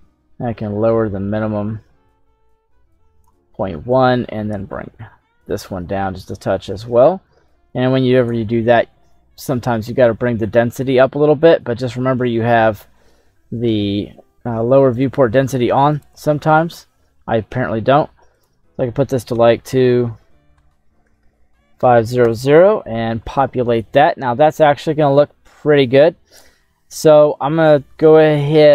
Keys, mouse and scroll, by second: 3.9-8.4 drag, 9.8 middle click, 11.0 middle click, 15.0 click, 15.9 click, 17.4 middle click, 18.3-22.5 drag, 21.2 KP_0, 27.4 right click, 27.8-28.2 scroll down 3, 28.2 middle click.